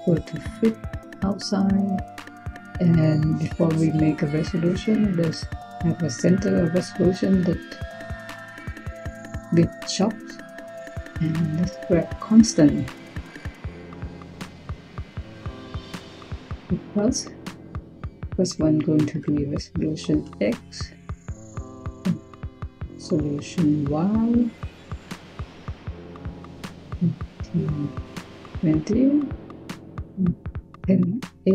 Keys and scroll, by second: 3.2 Tab, 10.4-11.6 typing, 18.6-20.0 typing, 21.9-22.6 typing, 26.1-27.4 typing, 28.5 typing, 29.6-30.9 typing.